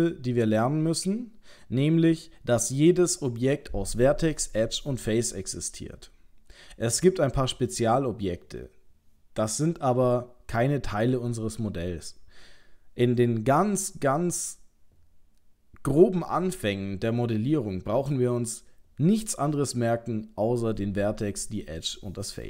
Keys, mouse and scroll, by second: 0.9 middle click.